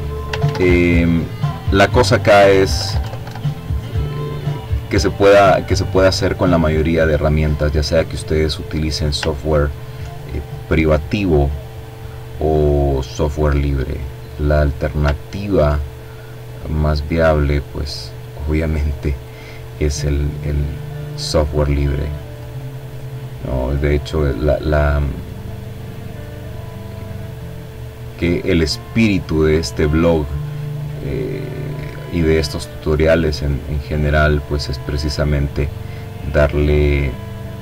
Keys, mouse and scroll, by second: 0.3 Left, 0.8 Down, 4.9-5.7 scroll up 2, 6.3 click, 6.9-7.5 ctrl+scroll up 2, 9.3 click, 10.6-12.0 drag, 12.8-13.3 ctrl+scroll down 2, 13.7-17.3 drag, 18.3-20.3 drag, 20.4 click, 21.0 click, 23.4-26.2 drag, 26.5-27.7 drag, 29.6-30.9 drag, 31.6-32.9 drag, 33.0 click, 33.8 click, 37.0 click.